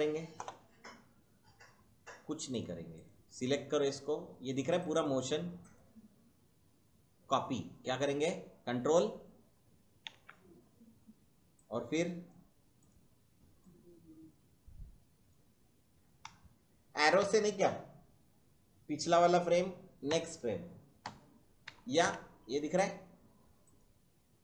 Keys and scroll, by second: 10.0 ctrl+c, 16.2 Right, 17.1 Left, 20.0 Right, 20.9 Left, 21.6 Right, 22.0 Left.